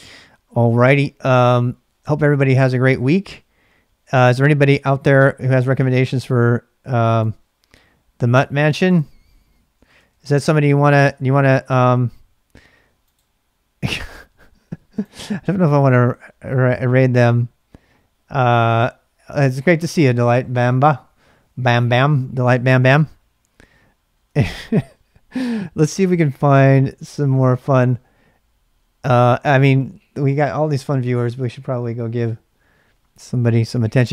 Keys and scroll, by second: 9.8 ctrl+b, 9.9 ctrl+k, 10.1 ctrl+k, 24.3 super+Tab.